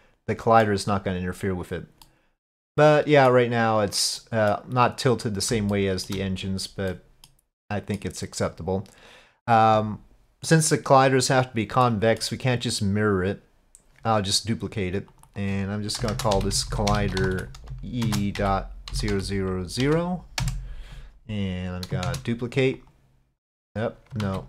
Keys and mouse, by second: 2.1-3.4 middle drag, 4.3 middle drag, 5.7-6.1 shift+middle drag, 7.0 middle drag, 7.7 middle click, 11.9-12.3 middle drag, 15.2-21.1 drag, 16.7 l, 19.1 0, 22.1 shift+d, 23.7 click, 24.3 ctrl+z.